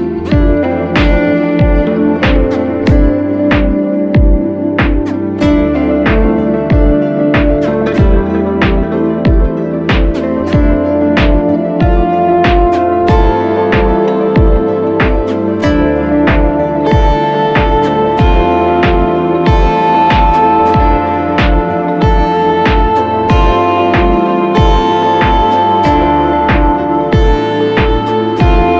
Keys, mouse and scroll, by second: 8.8-9.8 scroll up 1, 9.8 double click, 12.2 e, 27.7 double click.